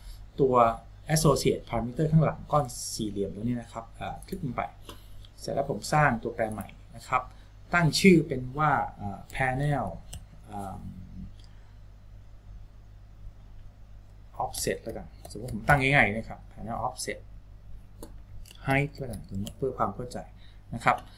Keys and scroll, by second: 9.5-10.7 typing, 14.7-16.4 typing, 18.8-20.3 typing.